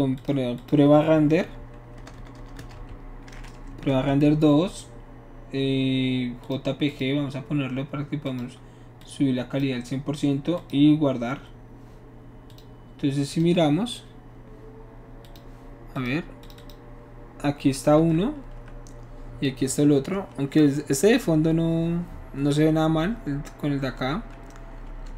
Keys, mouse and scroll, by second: 0.1 click, 0.6 click, 2.0 BackSpace, 2.1 BackSpace, 2.3 BackSpace, 2.7 2, 3.7 Left, 3.9 space, 6.4 click, 6.9 click, 8.2 click, 9.0 click, 10.5 click, 12.5 click, 13.3 click, 15.2 click, 15.9 click, 16.4 click, 16.5 click, 18.7 click, 19.6 right click, 20.1 click.